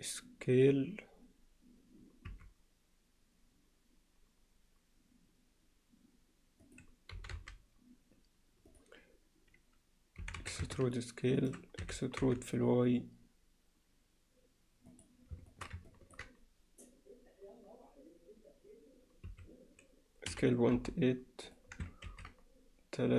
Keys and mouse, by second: 2.3 s, 7.2 g, 11.8 e, 15.5 shift+middle click, 15.9 ctrl+alt+middle click, 19.3 s, 22.1 ctrl+r.